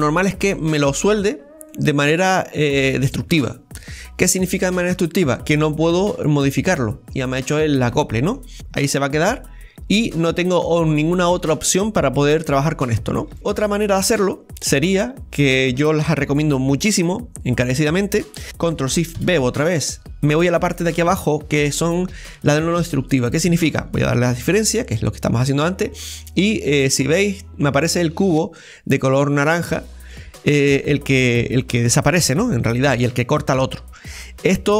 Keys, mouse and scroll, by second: 1.7-4.7 middle drag, 6.5 middle click, 7.3-7.9 scroll up 2, 7.9 scroll up 3, 7.9-10.2 middle drag, 10.7-11.1 scroll up 2, 11.1-14.6 middle drag, 14.1 ctrl+z, 14.6-15.2 scroll down 5, 15.2 middle click, 16.2-17.4 middle drag, 17.4-18.4 scroll down 1, 19.1 ctrl+shift+b, 25.5-29.5 middle drag, 29.5-30.1 scroll up 1, 30.1 middle click, 31.0-31.6 scroll down 1, 31.6 scroll down 1, 31.8 shift+middle click, 32.5-32.9 scroll down 1, 32.9 middle click, 33.9 scroll up 1, 34.1-34.7 middle drag.